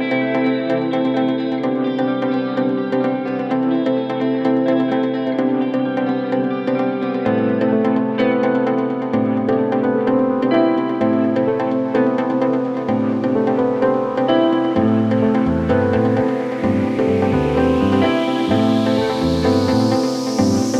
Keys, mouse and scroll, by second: 1.0-2.3 alt+scroll down 1, 4.3-4.8 alt+scroll up 1, 7.1-7.8 drag, 8.5 ctrl+z, 10.0-10.9 alt+click, 11.2 space, 11.3 click, 11.6-12.0 space, 12.9 t, 15.8-16.8 drag, 17.8 Delete, 20.5 ctrl+shift+End.